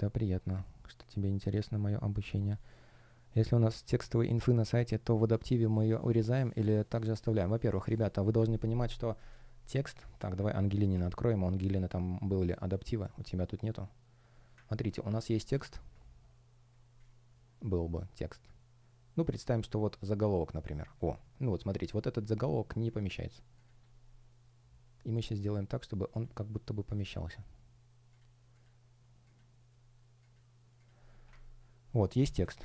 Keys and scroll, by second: 9.2 space, 10.6 shift+super+e, 15.0 space, 16.6 space, 21.3 super+space.